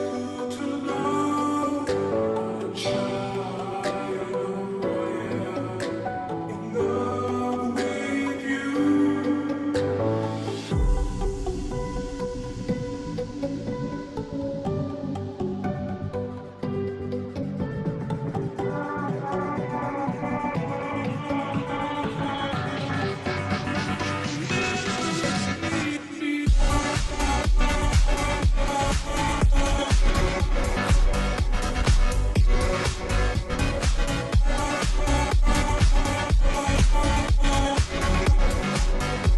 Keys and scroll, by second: 9.7-10.4 typing.